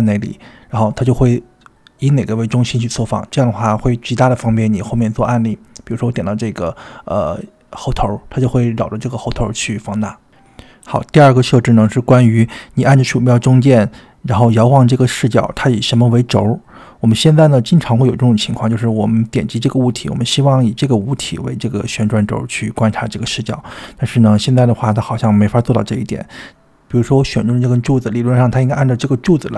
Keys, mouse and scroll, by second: 0.0-0.6 scroll up 5, 0.9 scroll down 1, 1.1-1.5 scroll down 3, 2.0 scroll down 1, 2.8 scroll down 1, 3.4 scroll down 1, 4.5 click, 5.2 scroll up 3, 6.7-7.2 scroll up 1, 7.6-8.4 shift+middle drag, 8.7 scroll down 1, 9.6 click, 9.6 scroll down 3, 12.6-15.0 middle drag, 16.1 click, 16.8-18.2 middle drag, 18.5-19.6 shift+middle drag, 20.0 drag, 20.8-22.7 middle drag, 22.9-24.5 middle drag, 25.8-28.0 middle drag, 29.2 click.